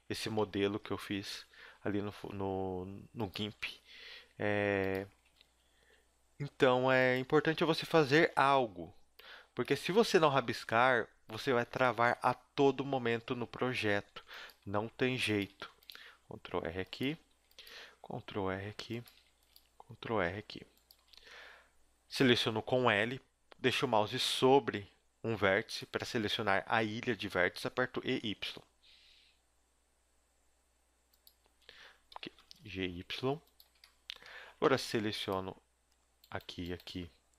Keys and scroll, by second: 1.3 z, 1.6 s, 3.3 g, 5.2 e, 7.3 a, 8.3 b, 9.4 z, 10.4 g, 12.8 a, 14.1 ctrl+r, 15.4 a, 15.7 ctrl+r, 17.0 a, 17.3 ctrl+r, 19.1 a, 19.4 ctrl+r, 20.7 a, 20.9 a, 22.3 l, 23.7 a, 24.3 l, 27.8 e, 31.4 a, 32.1 l, 32.5 g, 33.6 a, 34.6 ctrl+Tab.